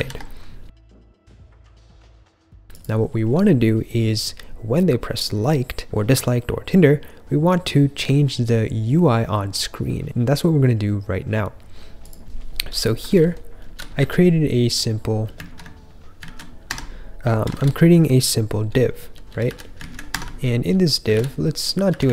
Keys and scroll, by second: 0.6 j, 13.0 k, 13.7 j, 13.9 j, 15.5 super+/, 16.2 super+z, 16.6 Escape, 17.5 shift+v, 18.6-22.1 typing, 19.7 super+/.